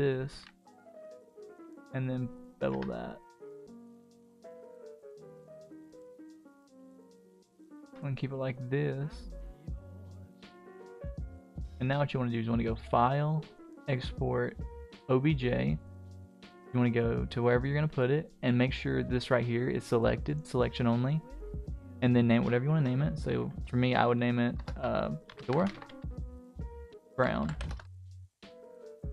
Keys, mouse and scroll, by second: 0.3 ctrl+b, 2.7 Tab, 3.1-3.7 middle drag, 3.8-4.2 scroll down 3, 4.2 scroll up 1, 4.2-6.4 middle drag, 6.7 ctrl+z, 7.1 ctrl+z, 7.6-8.0 scroll up 2, 7.8 Tab, 8.0-8.9 middle drag, 9.0-9.3 scroll down 2, 9.3-10.0 middle drag, 9.3 scroll up 1, 10.1 scroll down 1, 10.4 middle drag, 10.7-11.2 scroll down 1, 11.2-12.1 middle drag, 12.8-14.8 drag.